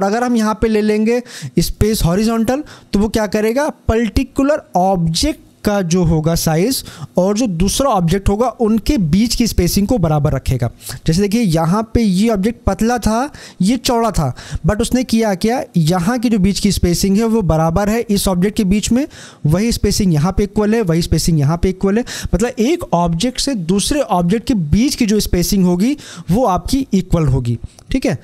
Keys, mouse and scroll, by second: 1.6 click.